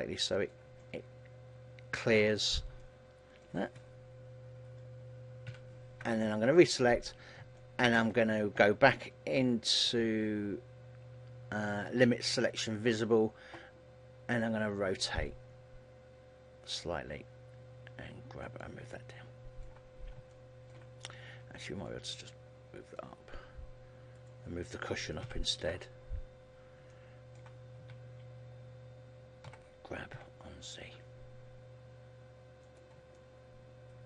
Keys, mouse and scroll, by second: 0.8 middle click, 5.6 ctrl+l, 6.5 KP_3, 7.2-8.1 scroll down 4, 7.7 shift+middle click, 12.3 click, 13.0-14.0 scroll up 2, 14.6 r, 17.0 click, 17.3 g, 18.7 click, 19.0 middle click, 20.0-20.4 scroll up 3, 20.4 shift+middle click, 22.0 click, 23.5 scroll down 2, 24.2 right click, 25.4 ctrl+l, 26.7 scroll down 1, 27.0 middle click, 27.9 KP_3, 29.8 g, 32.8 click, 33.3 middle click.